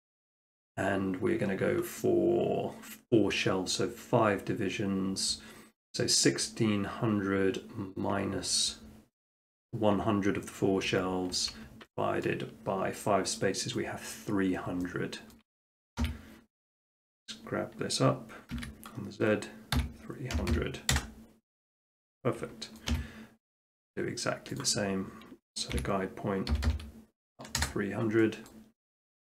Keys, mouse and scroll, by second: 10.9 Escape, 12.3-13.4 shift+middle drag, 14.2-14.7 scroll down 1, 14.7 scroll down 1, 14.8 shift+scroll up 1, 15.3 shift+middle click, 16.0 g, 17.1 click, 18.1 click, 18.6 z, 19.8-20.4 typing, 20.9 Return, 22.8-23.9 middle drag, 22.9 t, 24.6-25.7 drag, 25.8-26.5 typing, 27.6 Return, 28.5 middle drag.